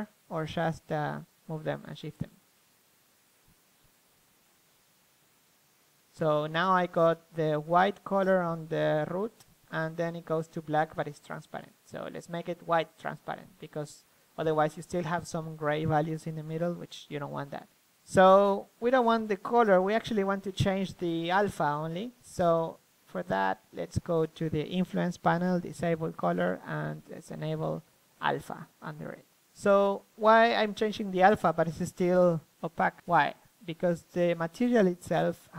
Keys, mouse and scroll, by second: 0.2-5.9 drag, 6.7-12.5 drag, 13.9-17.0 middle drag, 17.0-20.6 drag, 21.7-26.0 drag, 29.5-30.7 middle drag, 30.7-34.6 drag.